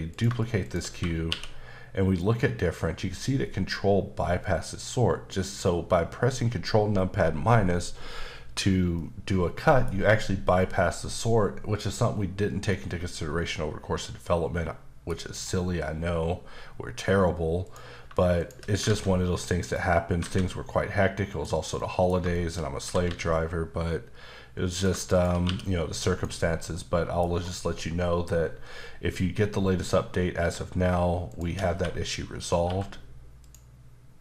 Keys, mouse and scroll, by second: 0.1 click, 0.6 shift+click, 1.3 q, 8.9 middle click, 12.7 middle click, 15.2-17.5 scroll down 2, 17.6 click, 18.4 shift+click, 18.8 alt+x, 19.6 click, 20.2 alt+a, 21.3 click, 21.8 middle click, 22.3 middle click, 22.8 typing, 24.7 click, 25.1 click, 25.4 q, 26.0 click, 26.7 middle click, 27.2 scroll up 1, 31.2 shift+click, 31.7-32.6 typing, 33.4 click.